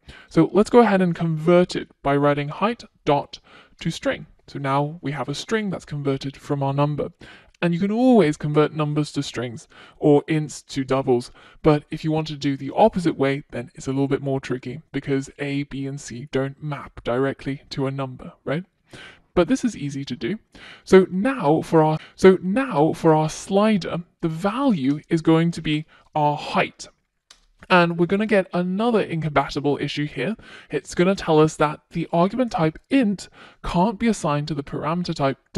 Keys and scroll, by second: 2.6 Return, 22.3 Return, 34.9 F1.